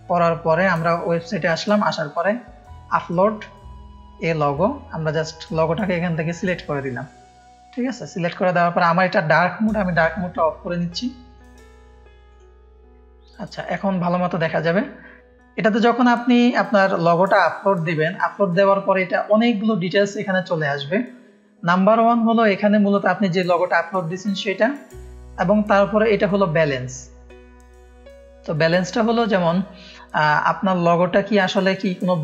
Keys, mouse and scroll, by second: 2.6-4.2 drag, 5.1 click, 7.5 scroll down 1, 8.0-8.6 scroll up 1, 11.2-12.2 drag, 13.6 click, 14.4 scroll up 2, 17.3 scroll up 1, 24.2 middle click, 25.0 middle click.